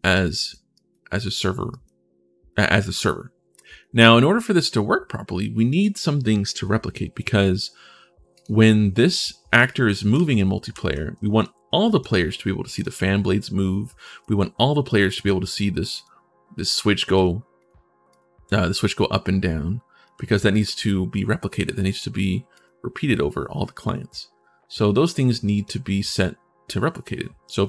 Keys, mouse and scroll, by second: 0.1 right click, 0.5 right click, 0.9 right click, 1.5 right click, 3.6 right click, 4.7-5.6 scroll down 1, 8.1 right click, 8.7 right click, 9.4-11.1 right drag, 9.9-11.6 typing, 11.1 click, 12.5 click, 12.9 4, 14.0-15.0 right drag, 14.2 w, 14.7 a, 15.7 right click, 16.9 right click, 17.8 4, 17.8 right click, 18.1 4, 19.8 right click, 19.9 s, 22.3 click.